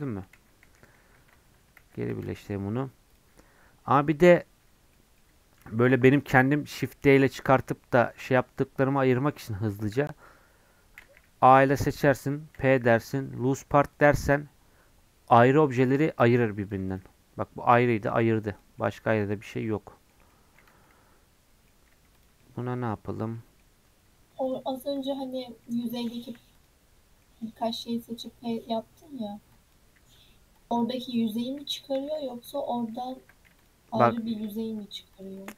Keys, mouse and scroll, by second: 0.4 ctrl+z, 0.7 ctrl+z, 2.2 Tab, 2.5 middle click, 3.1 click, 3.7 Tab, 4.0 middle click, 4.6 Tab, 4.9 middle click, 5.6 Tab, 5.8 3, 6.1 click, 6.5 g, 7.3-11.0 middle drag, 11.0 a, 16.4 Tab, 16.6 click, 17.0 g, 18.5 click, 18.8-20.7 middle drag, 20.7 Tab, 20.8 scroll up 1, 20.9-21.9 middle drag, 21.9 Tab, 22.1 click, 22.4 middle click, 22.6 Tab, 23.1 Tab, 23.3 middle click, 23.7 Tab, 24.0 Tab, 24.3 Tab, 25.0 Tab, 25.2 scroll down 2, 25.4 middle click, 25.8 click, 26.1 shift+middle click, 26.5 click, 26.9 scroll up 1, 27.2 middle click, 27.5 scroll down 1, 27.6 middle click, 28.4 scroll down 4, 28.8 click, 29.5 click, 29.9 w, 30.5 click, 31.0 scroll up 2, 31.3-33.1 middle drag, 33.1 ctrl+j, 33.6 click, 33.9 middle click, 34.3 scroll down 1, 34.4 Tab, 34.8 Tab, 35.1 click.